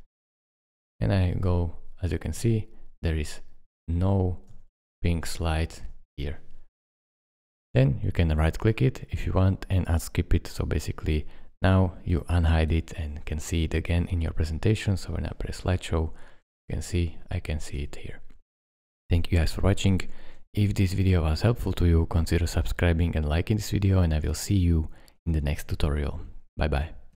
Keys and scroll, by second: 0.7 Right, 1.5 Right, 3.1 Right, 3.8 Right, 4.5 Left, 7.5 Escape, 16.0 Left, 16.5 Left, 16.7 Right, 17.5 Right, 17.8 Left, 19.6 Escape.